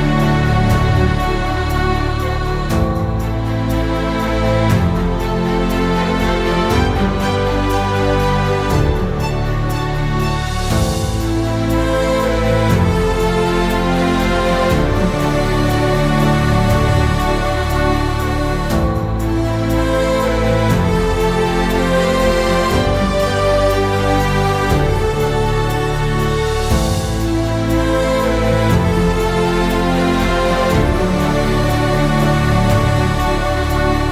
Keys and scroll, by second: 0.0-0.8 typing, 2.3-7.7 typing, 9.5-13.0 typing, 14.3-17.5 typing, 18.9-19.8 typing, 21.3-34.1 typing.